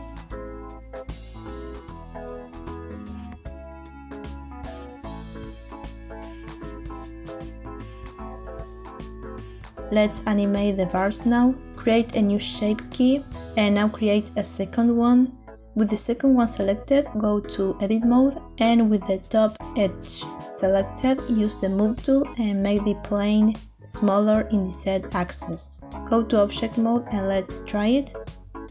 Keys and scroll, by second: 4.3 Tab, 10.8 Tab, 19.2 Tab, 26.6 Tab.